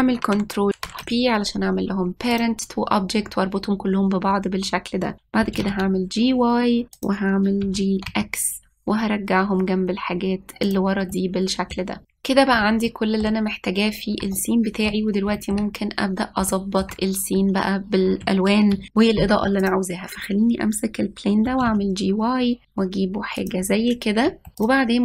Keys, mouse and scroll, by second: 1.6 ctrl+p, 3.9 scroll down 1, 6.2 g, 8.4 g, 11.9 middle click, 12.1-12.6 scroll up 1, 12.6 click, 13.6-16.5 shift+middle drag, 16.5-17.2 scroll up 1, 17.2 middle click, 17.8-18.3 shift+scroll up 1, 18.4-19.2 scroll up 1, 19.2 ctrl+s, 20.4 click, 22.2 g, 24.6-25.0 scroll up 1.